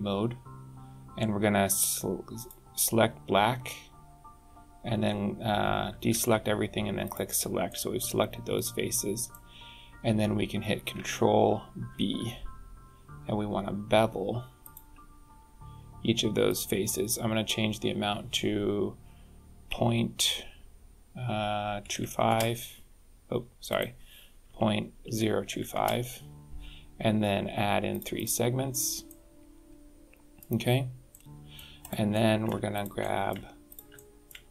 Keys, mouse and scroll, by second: 0.2 scroll down 3, 2.3 click, 6.1 alt+a, 7.0 click, 7.6 middle click, 9.5-9.8 scroll up 2, 11.8 ctrl+b, 16.4 click, 23.6 click, 27.8 click, 28.1 click, 29.0 middle click, 31.0 middle click, 31.7 click, 32.0 middle click, 32.6 shift+click, 32.9 middle click, 33.6 shift+click, 33.9 middle click.